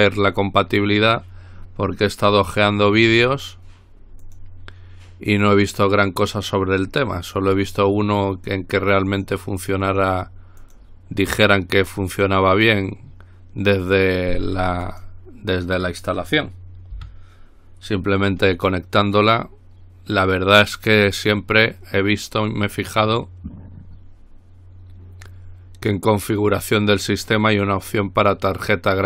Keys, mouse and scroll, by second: 0.4 click, 2.5-3.7 drag, 4.4 click, 7.8 click, 8.6 click, 9.3 click, 10.1 click, 10.8 click, 12.3 click, 15.1 click, 17.2 Delete, 22.5 click.